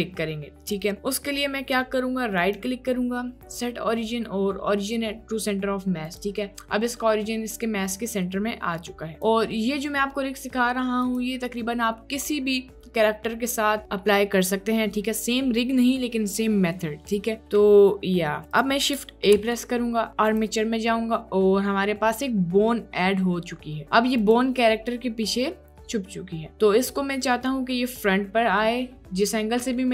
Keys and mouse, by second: 2.6-6.3 drag, 9.1 click, 9.6-9.9 drag, 11.0 click, 19.3 shift+a, 22.1 middle click, 22.7-23.2 middle drag, 28.8-29.7 middle drag.